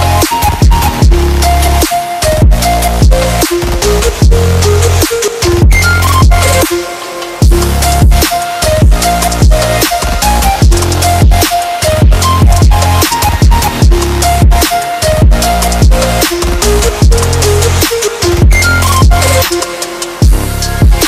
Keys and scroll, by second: 1.4 Delete, 4.1 shift+m, 5.4-7.3 typing, 8.9 F11, 11.0 6, 11.1 8, 11.2 0, 11.3 Escape, 13.6 Tab, 15.9 ctrl+c, 16.2 Tab, 16.8 ctrl+v, 19.0 Tab, 20.8 ctrl+c.